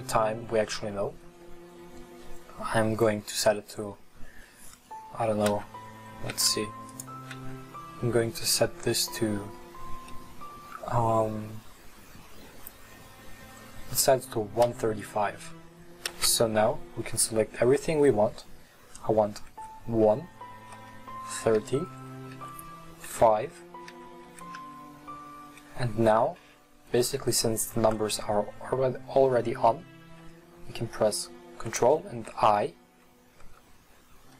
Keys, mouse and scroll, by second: 5.7 Tab, 6.4 Tab, 6.9 right click, 7.4 Tab, 14.7 l, 16.0 a, 16.2 a, 19.5-24.6 typing.